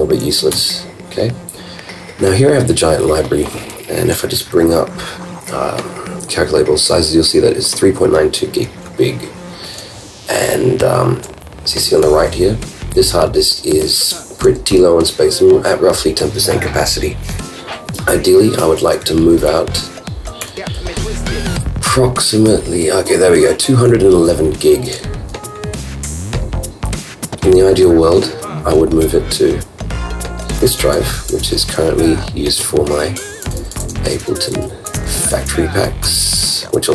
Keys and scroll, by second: 4.1 super+j, 19.2 super+Up, 20.4 super+i, 25.7 ctrl+super+w, 30.8 super+Up, 34.7 super+Down, 34.9 super+Up, 35.2 super+Up, 35.3 super+Down, 36.2 super+Up.